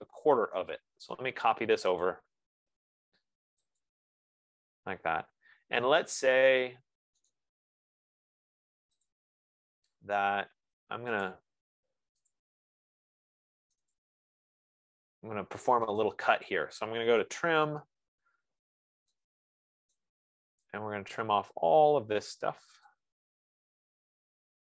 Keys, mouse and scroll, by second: 0.0-1.3 typing, 2.6 click, 4.3 click, 4.8 Escape, 5.6-5.9 scroll, 7.7 right click, 9.5 click, 11.7 click, 12.7 click, 17.4-18.5 typing, 19.3 scroll, 20.6 right click, 23.3 click.